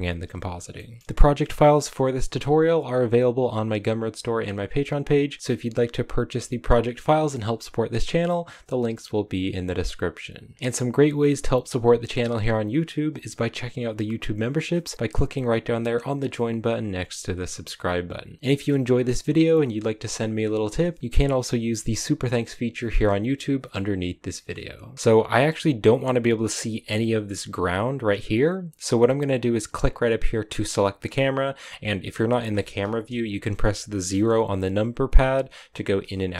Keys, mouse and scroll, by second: 25.6 right click, 26.5 a, 29.6 right click, 34.1 KP_0, 35.9 KP_0.